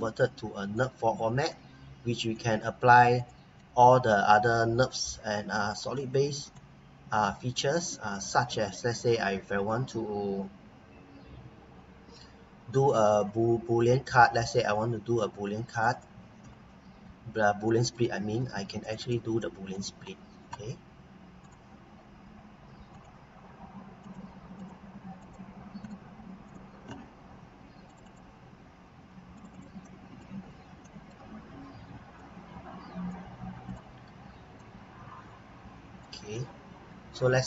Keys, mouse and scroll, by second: 1.1 scroll up 1, 1.5 right click, 2.5 scroll down 1, 3.1 click, 3.5 right click, 5.2 scroll up 1, 5.7 scroll down 1, 6.0 right click, 8.1 click, 8.5 right click, 15.7 click, 17.0 scroll up 1, 17.7 right click, 18.8 click, 19.4 right click, 20.1 scroll up 1, 21.4 click, 25.8 right click, 26.4 click, 29.8 right click, 30.4 scroll down 1, 30.8 right click, 32.1 click, 32.7-33.4 typing, 36.3 right click.